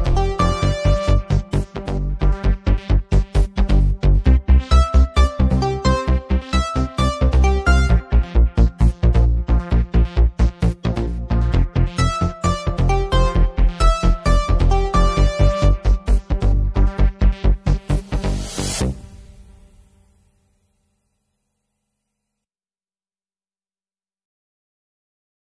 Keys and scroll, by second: 7.6-8.7 typing, 19.2-20.7 typing.